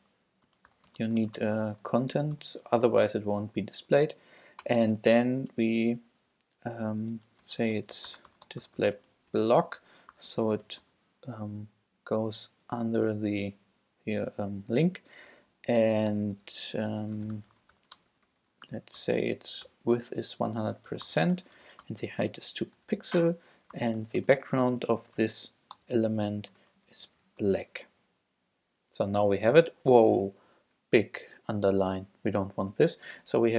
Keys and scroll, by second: 0.0-2.4 typing, 4.6 Return, 7.2-11.3 typing, 16.1 Return, 16.8-19.5 typing, 19.7 Return, 20.7-27.4 typing.